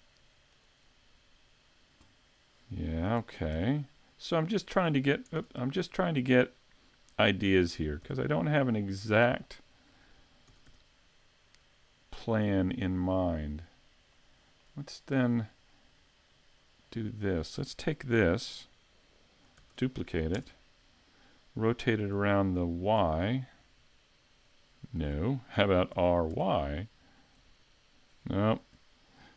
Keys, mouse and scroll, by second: 0.6 right click, 3.2 s, 4.6 right click, 5.4 z, 7.5 s, 9.1 click, 9.4 middle click, 10.5 s, 12.4 click, 12.8 middle click, 13.7 scroll down 3, 14.2 middle click, 15.3 middle click, 16.8 middle click, 19.6 shift+d, 23.7 r, 25.9 r.